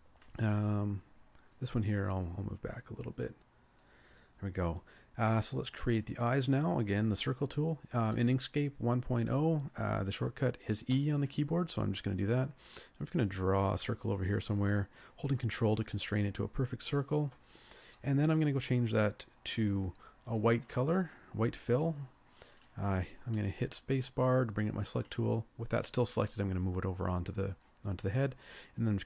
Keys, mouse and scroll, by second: 11.0 e, 23.7 space.